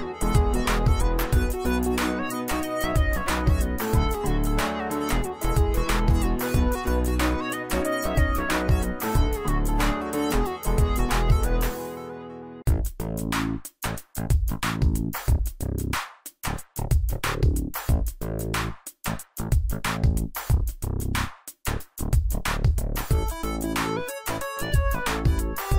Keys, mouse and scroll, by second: 2.3 click, 5.7 click, 8.0 click, 15.1 scroll up 1, 16.3 click, 17.7 scroll down 1, 18.2 scroll up 1, 18.9 scroll down 1, 19.1 click, 20.4 scroll up 1, 20.6 click, 24.2 click.